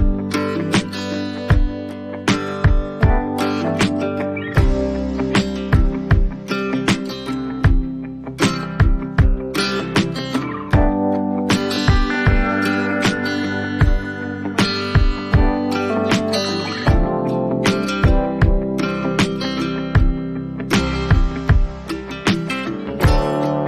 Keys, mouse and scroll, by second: 1.3 click, 3.0 ctrl+z, 3.1 click, 5.6 click, 8.2 click, 10.9 click, 14.0 ctrl+o, 14.0 ctrl+0, 14.1 ctrl+0, 19.1 click, 20.3 click, 23.1 click.